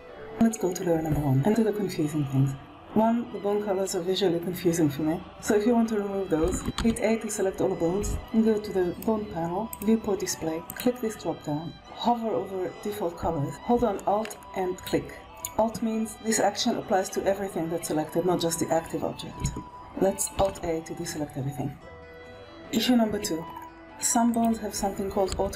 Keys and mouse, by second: 6.4 alt+a, 8.8 click, 9.6 click, 10.7-14.7 drag, 20.4 alt+a, 24.2 click, 25.2 r.